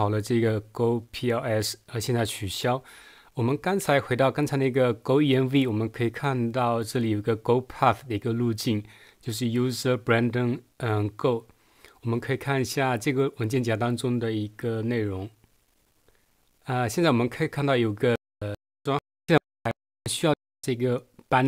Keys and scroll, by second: 18.2 Right, 18.5 Right, 19.0 Right, 19.3 Right, 19.7 Right, 20.3 Right.